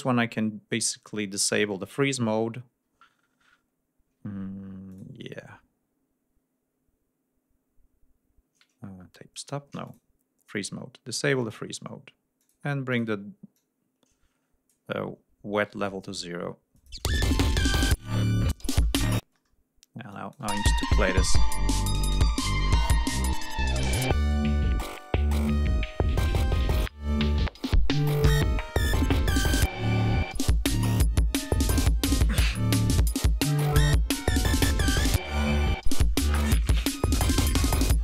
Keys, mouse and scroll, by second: 0.0-1.1 scroll down 4, 4.1 d, 4.9 click, 9.4 shift+right click, 9.9 shift+click, 10.5-11.7 drag, 12.4 click, 12.9 click, 13.6-14.9 drag, 15.8 shift+right click, 16.8 click, 17.0 space, 17.3 ctrl+scroll up 2, 18.8-19.2 ctrl+scroll down 2, 19.2 ctrl+space, 20.1 click, 20.5 space, 20.6 ctrl+scroll up 2.